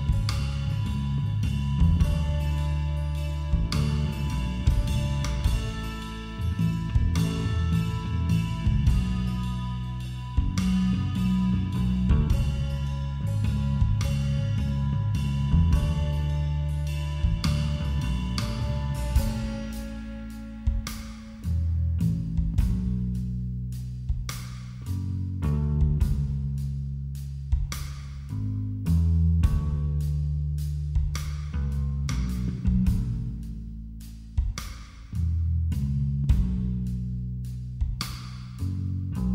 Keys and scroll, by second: 2.2 [, 21.2 ctrl+=, 25.9 ctrl+=, 26.1 ctrl+-, 27.5 ].